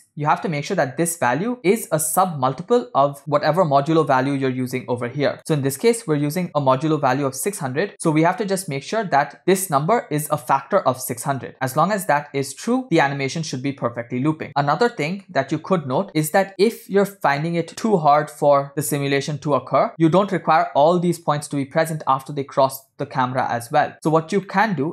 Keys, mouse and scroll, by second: 3.2 scroll down 4, 3.3-4.8 middle drag, 5.1-6.2 scroll up 7, 5.4 middle click, 7.9 scroll down 4, 8.3-9.4 middle drag, 9.4 scroll up 3, 14.3 scroll down 1, 15.3 KP_0, 16.1 middle click, 16.4 shift+middle click, 17.7 scroll up 1, 23.5 middle click, 24.2 scroll down 1, 24.6 middle click.